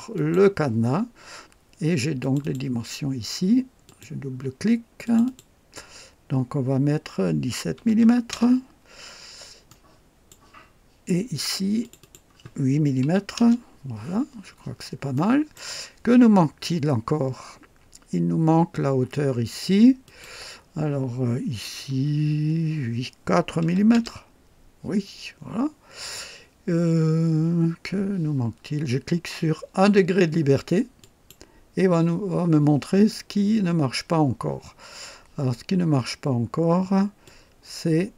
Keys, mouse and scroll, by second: 0.1 click, 2.2 click, 3.8 click, 5.0 click, 7.7 KP_1, 8.0 KP_7, 8.3 Return, 9.7 right click, 11.8 click, 13.0-13.3 typing, 14.4-14.7 scroll up 2, 15.1-15.7 right drag, 15.1 typing, 20.0 click, 21.9 i, 23.6 KP_4, 23.9 Return, 31.0 click, 37.2-38.1 drag.